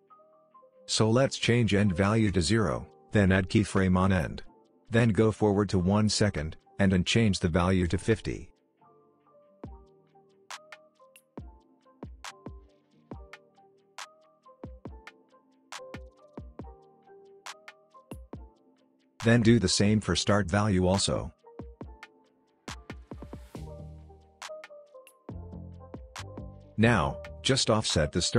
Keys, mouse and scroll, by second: 1.5-2.4 drag, 5.8-6.7 shift+drag, 9.2 Return, 10.8 click, 12.1 Return, 13.7-14.7 click, 14.5 space, 16.6-19.1 drag, 22.7-23.0 shift+drag, 23.7 click, 24.9 Return, 26.5 click, 27.5-28.2 drag.